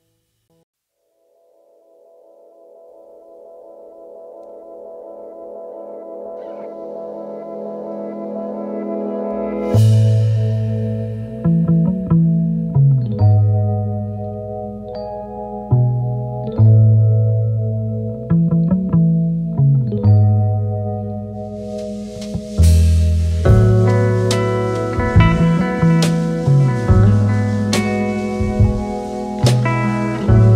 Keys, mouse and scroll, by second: 2.0 alt+scroll down 4, 2.3 space, 6.3 alt+scroll up 5, 6.6 space, 8.8-9.8 alt+scroll down 4, 9.1 space, 10.5 alt+scroll down 1, 10.6 alt+scroll up 2, 14.4 alt+scroll down 2, 14.7 space, 16.8 space, 17.2 space, 19.5 double click, 20.1 alt+scroll up 2, 20.3 space, 28.3 Right, 28.8 Right.